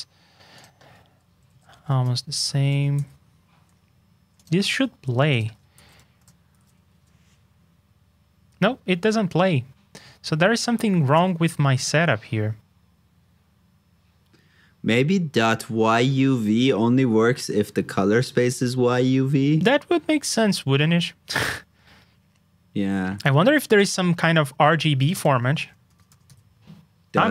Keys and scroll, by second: 5.7 super+c, 6.1 super+j, 11.1 super+j.